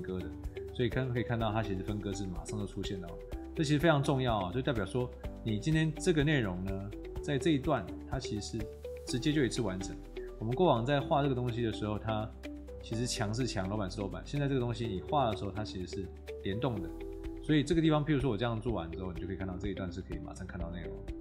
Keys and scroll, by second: 9.0 Escape, 9.7 r, 12.9 Escape, 15.8 Escape.